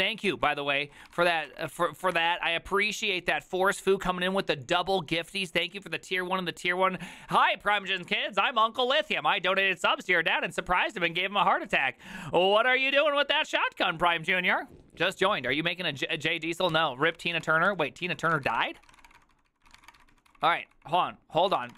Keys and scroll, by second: 0.0 Return, 0.3 ctrl+u, 0.4 ctrl+u, 0.6 ctrl+u, 0.9 ctrl+u, 1.1-1.8 typing, 1.8 ctrl+d, 17.2-21.7 typing, 18.1 ctrl+u.